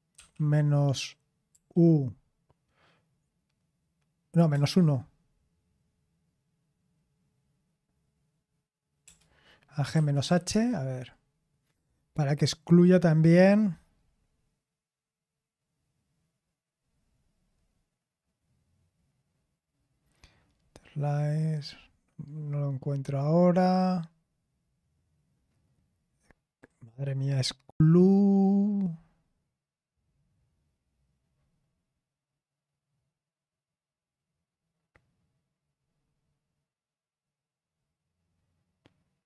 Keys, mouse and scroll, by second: 0.1 typing, 1.5 typing, 9.9 typing, 10.5 Return, 35.2-36.6 scroll up 1, 36.6-39.2 scroll up 1.